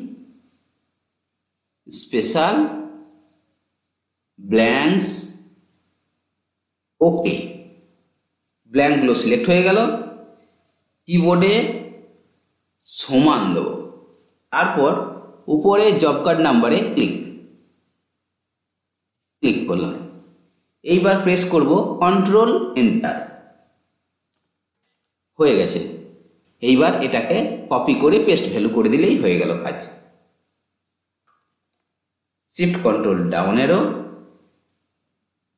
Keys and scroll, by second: 22.4 ctrl+Return, 32.2 ctrl+shift+Down.